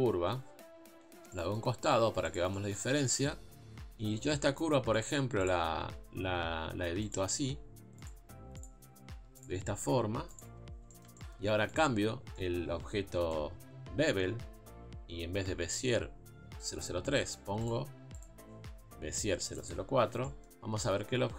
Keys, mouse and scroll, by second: 1.2 g, 4.3 Tab, 5.0 click, 5.5 shift+click, 5.8 s, 7.4 s, 8.6 click, 9.4 shift+click, 9.6 s, 10.5 Tab, 11.8 click, 19.7 click.